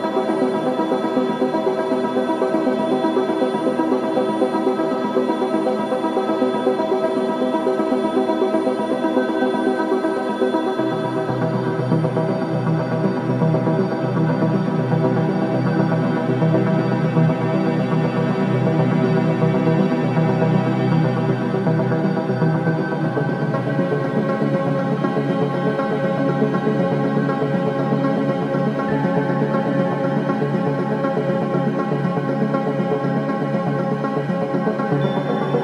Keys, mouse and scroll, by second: 2.8 click, 3.3 right click, 8.1 click, 10.4 scroll up 1, 12.3 right click, 12.8-13.2 scroll up 1, 14.3-15.8 drag, 15.6-16.3 typing, 16.8 click, 19.5-21.0 typing, 21.6 right click, 22.8 click, 25.3 click, 26.3-27.2 typing, 28.4 click, 28.9-30.3 typing, 31.2 Return, 31.9 click, 35.5 click.